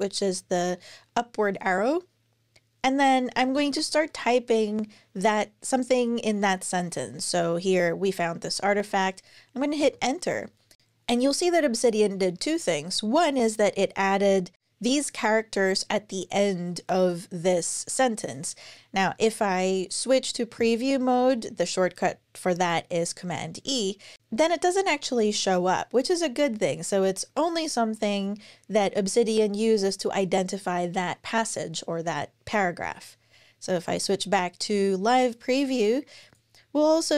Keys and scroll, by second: 2.9-4.5 typing, 9.6 Return, 23.0 super+e, 32.6 super+e.